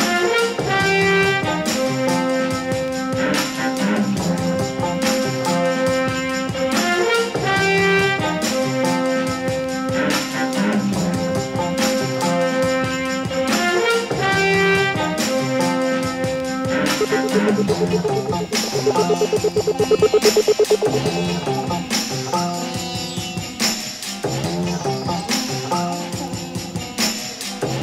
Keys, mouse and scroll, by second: 3.2 click, 4.6 click, 5.5-5.9 drag, 6.1-6.4 drag, 6.2-7.4 typing, 7.1 click, 9.4-10.9 ctrl+drag, 14.8 click, 15.3 ctrl+click, 16.1 click, 16.6 Tab, 17.1 alt+a, 18.0 Tab, 18.9 click, 19.6 click, 20.7 click, 21.4 click, 22.3 click, 23.1 click, 23.7 click, 24.2 typing, 25.4-26.4 drag, 26.6 click, 27.0 l, 27.7 ctrl+v.